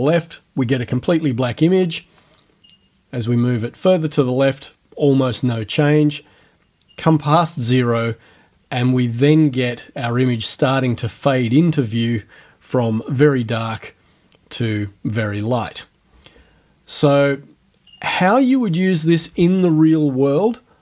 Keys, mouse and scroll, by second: 2.0-4.4 drag, 6.2-9.9 drag, 11.1-18.5 drag, 18.8 right click.